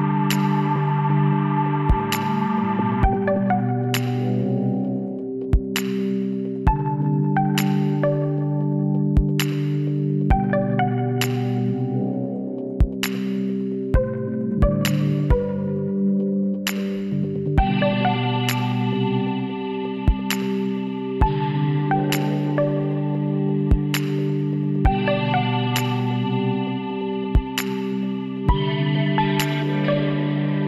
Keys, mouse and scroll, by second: 0.6-2.6 middle drag, 2.6 KP_1, 4.0 e, 5.7 s, 8.3-9.7 middle drag, 9.7 ctrl+z, 10.1 ctrl+z, 11.5-13.3 drag, 13.8 e, 15.1-16.9 drag, 16.9 s, 19.8 middle click, 20.5 middle click, 21.2 KP_3, 22.4 middle click, 23.4-24.4 middle drag, 24.5 middle click, 24.7-26.5 drag, 30.3 e.